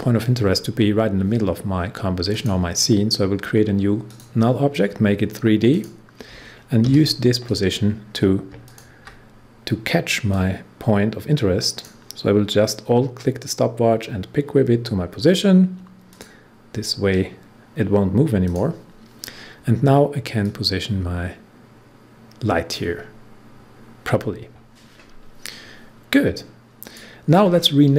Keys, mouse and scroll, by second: 2.2 click, 6.8 p, 8.6-14.2 alt+drag, 16.0 click, 18.4-25.4 drag, 26.7 click, 26.8 click.